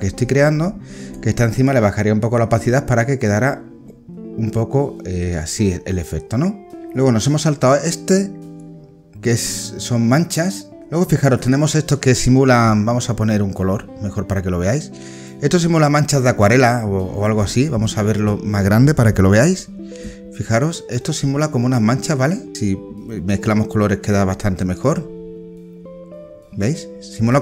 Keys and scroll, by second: 10.8 ctrl+z, 17.6 alt+space.